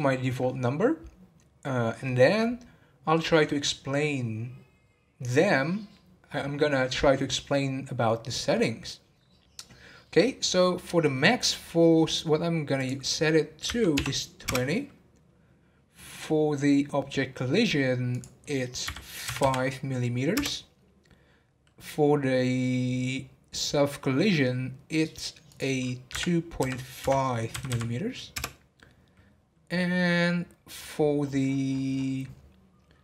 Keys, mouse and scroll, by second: 10.7-11.4 scroll down 12, 12.8-15.9 drag, 17.0-18.1 scroll down 2, 18.1-19.4 drag, 19.4 m, 20.8 scroll down 2, 25.4-27.7 drag, 27.7 m, 30.9-32.2 scroll up 22.